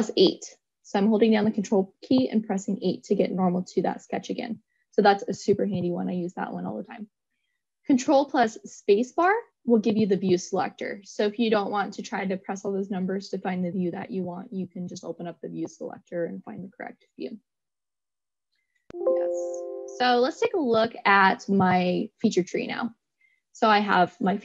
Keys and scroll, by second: 0.8 ctrl+8, 9.8 ctrl+space.